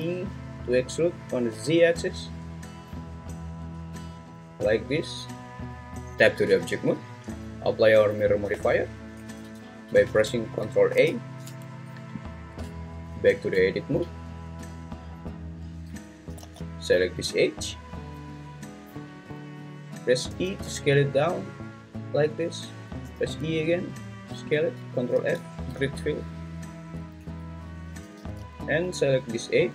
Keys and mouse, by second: 1.5 z, 6.1 Tab, 9.2 ctrl+a, 10.1 ctrl+z, 10.9 ctrl+a, 12.6 Tab, 16.1 `, 16.4 alt+z, 17.4 click, 20.3 e, 20.6 s, 23.0 e, 23.3 s, 24.5 click, 25.1 ctrl+f, 27.2 `, 28.2 alt+z.